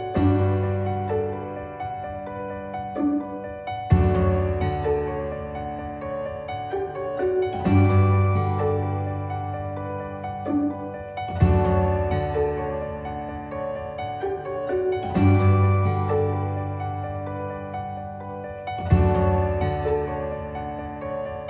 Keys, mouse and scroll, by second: 8.8 ctrl+g, 10.5-12.0 drag, 12.0 ctrl+g, 12.5-13.2 click, 17.8-21.4 drag, 20.7-21.4 click.